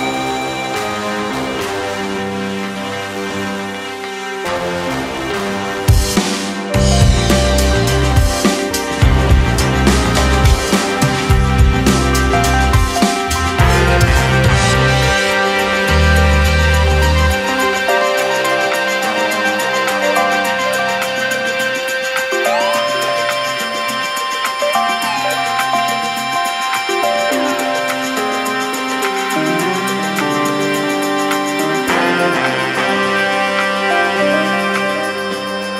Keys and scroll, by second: 2.4 ctrl+[, 3.0 ctrl+h, 3.0 ctrl+space, 4.3 space, 4.8 ctrl+v, 7.1 ctrl+v, 9.3 ctrl+v, 12.9 ctrl+space, 13.9 space, 14.8 ctrl+c, 17.0 ctrl+[, 17.5 ctrl+space, 18.1 2, 18.3 space, 19.9 2, 20.8 KP_0, 22.1 space, 23.4 2, 23.8 KP_1, 23.9 Return, 24.8 space, 25.7 ctrl+k, 25.9 ctrl+2, 26.6 2, 27.3 space, 28.4 space, 33.1 2.